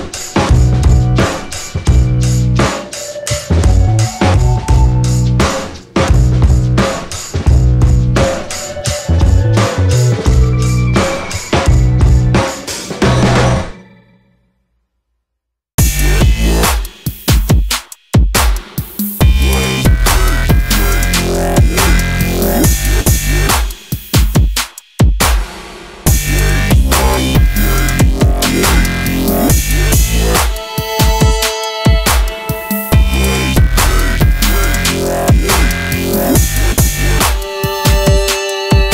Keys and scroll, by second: 1.6 ctrl+z, 9.0 space, 16.5 space, 18.2 space, 24.4 space.